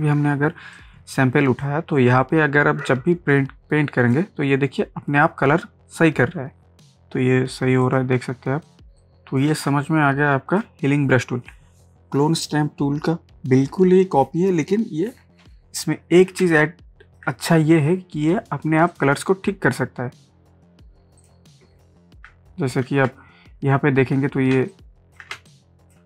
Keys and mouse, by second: 0.3 space, 0.7 click, 3.1-6.5 drag, 6.9 click, 8.9 space, 9.0 click, 9.3 space, 9.8 ctrl+space, 9.8 ctrl+click, 10.0 ctrl+click, 10.2 ctrl+space, 16.1 ctrl+space, 16.6 ctrl+click, 16.9 ctrl+space, 18.9 click, 21.2 click, 22.9 ctrl+z, 24.5 ctrl+space, 24.7 ctrl+click, 25.1 ctrl+space, 25.5 click, 25.8 space.